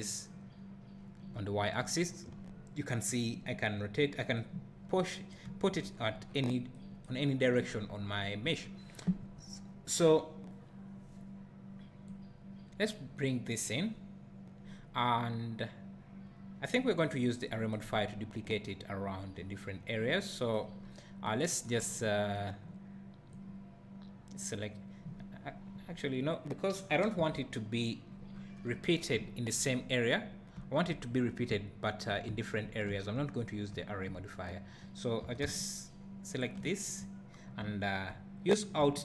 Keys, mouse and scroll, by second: 5.2 scroll down 1, 5.5 `, 6.0 scroll down 1, 12.1-21.3 drag, 20.8 scroll up 1, 23.3 click, 27.2 KP_0, 28.3-28.8 scroll down 1, 28.8 `, 29.2 scroll down 1, 29.3-36.6 drag, 30.1 `, 31.1 scroll up 1, 31.6 `, 35.2 g.